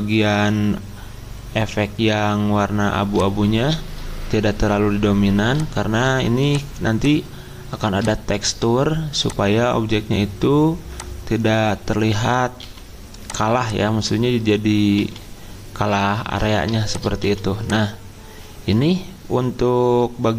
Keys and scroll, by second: 12.6 c, 16.2 ctrl+g, 17.2 c.